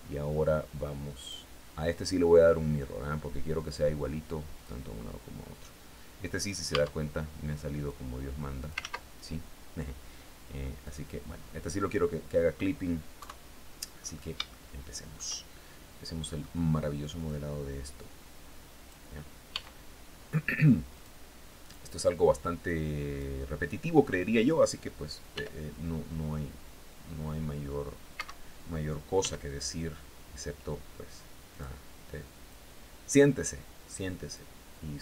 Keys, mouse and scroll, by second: 0.6 click, 1.4 click, 4.0 click, 6.2 Tab, 7.3-8.3 drag, 8.2 ctrl+z, 10.3 click, 10.9 scroll down 1, 11.2 click, 12.6 KP_3, 13.4-13.9 scroll up 1, 13.9-15.2 shift+middle drag, 16.7-18.5 drag, 18.9 s, 20.4 click, 21.1-22.8 drag, 24.7 r, 27.6 Escape, 28.6 s, 30.9 click, 31.9-34.0 drag.